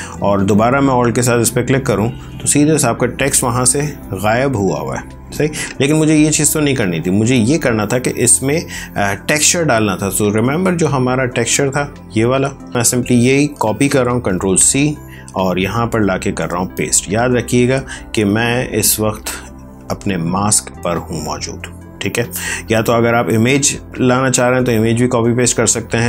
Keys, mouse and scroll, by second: 1.1 alt+click, 2.6 ctrl+space, 2.8 ctrl+click, 3.1 ctrl+space, 5.8 ctrl+z, 7.2 alt+click, 12.7 ctrl+a, 13.4 ctrl+c, 14.5 click, 15.5 ctrl+v, 17.2 ctrl+c, 17.2 d, 18.2 click, 19.3 ctrl+z, 22.3 ctrl+z, 23.0 ctrl+z.